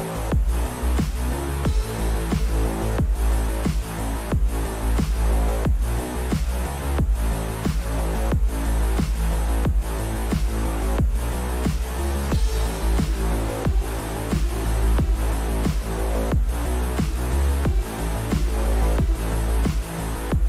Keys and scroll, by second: 2.0 q, 11.7 q.